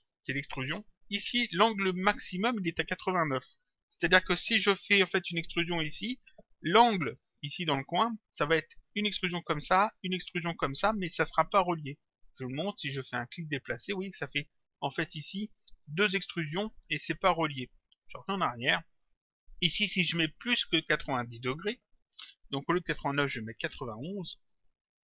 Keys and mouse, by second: 13.3 click, 18.5 click, 20.8 click.